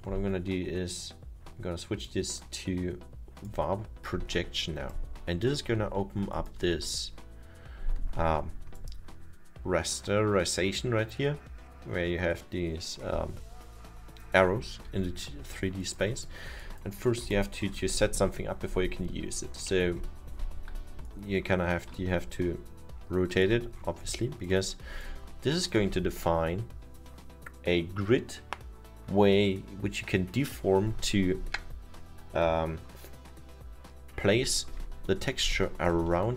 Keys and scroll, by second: 15.0 F2.